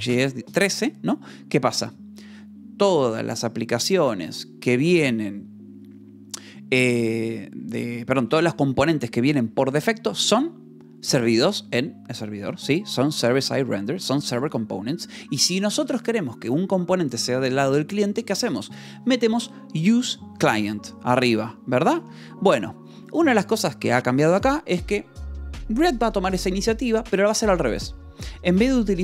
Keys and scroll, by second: 21.9 k, 23.4 shift+v.